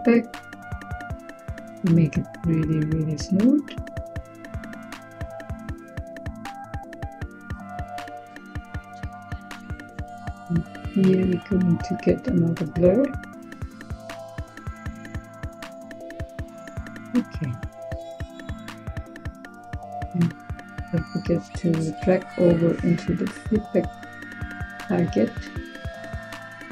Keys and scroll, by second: 11.6-12.4 typing.